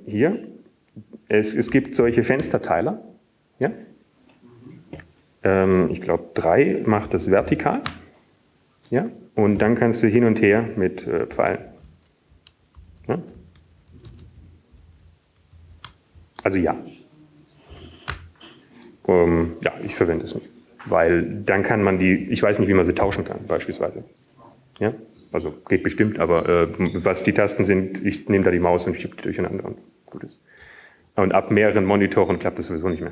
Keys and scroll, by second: 2.5 super+q, 5.1 ctrl+x, 6.2 2, 10.1 ctrl+x, 10.1 3, 13.4 alt+Right, 14.5 alt+Down, 14.5 Up, 16.1 alt+Up, 16.1 Right, 16.1 Left, 16.9 Up, 17.1-18.5 typing, 20.8 typing.